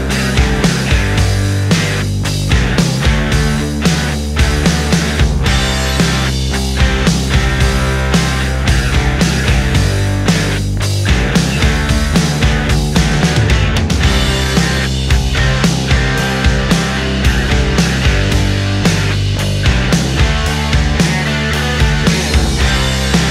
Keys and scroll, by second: 0.3 ctrl+z, 0.7 ctrl+z, 1.8 space, 5.5 ctrl+z, 6.0 ctrl+z, 6.2 ctrl+z, 8.0 ctrl+z, 12.3 space, 13.9 ctrl+z, 15.2 ctrl+z, 16.2-18.3 typing, 19.4 ctrl+z, 19.7 ctrl+z, 20.3 space, 20.5 space, 22.3 ctrl+z.